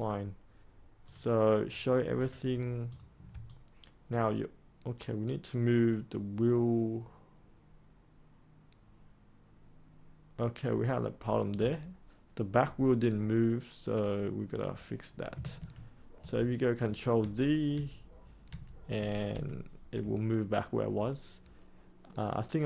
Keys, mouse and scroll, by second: 1.0 click, 3.4-11.4 alt+drag, 15.5 ctrl+z, 16.1 ctrl+z, 17.1 ctrl+z, 17.7 ctrl+z, 18.4 ctrl+z, 18.9 ctrl+z, 19.2 ctrl+z, 22.5 click.